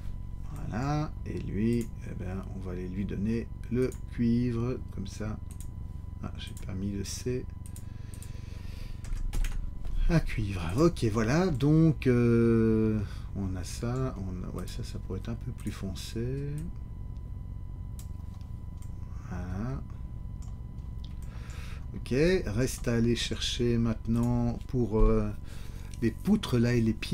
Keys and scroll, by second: 9.0 Caps_Lock, 9.3 c, 9.4 Caps_Lock.